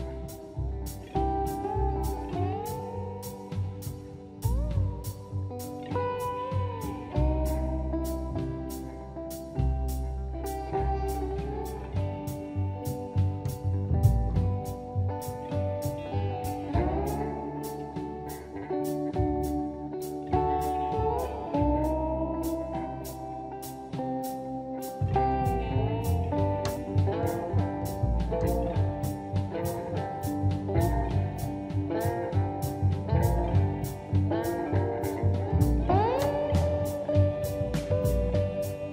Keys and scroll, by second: 10.1 space, 10.9 e, 11.3 space, 12.8 space, 14.5 p, 15.0 space, 19.4 Escape, 19.4 space, 29.8 e, 30.3 space, 34.4 e, 34.6 space.